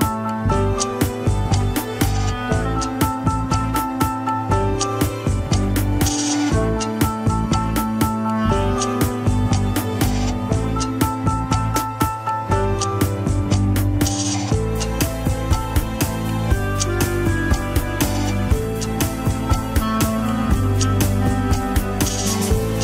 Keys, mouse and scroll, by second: 0.7 ctrl+p, 2.6 click, 3.0-3.4 scroll down 4, 3.4 shift+click, 4.2 scroll up 3, 4.5 g, 6.3-6.7 scroll up 2, 6.7 g, 7.5 click, 8.1 g, 8.7 click, 9.2 g, 11.1 click, 11.4 ctrl+Tab, 11.9 click, 12.7 click, 13.0 scroll down 1, 14.8 click, 15.4 KP_1, 15.9 shift+middle click, 16.4 click, 17.0 Tab, 17.6 shift+d, 18.2 KP_3, 18.6 g, 19.0 alt+z, 19.4 alt+z, 19.7 click, 20.0 alt+z, 20.2 s, 20.8 alt+z, 21.1 g, 22.3 KP_1.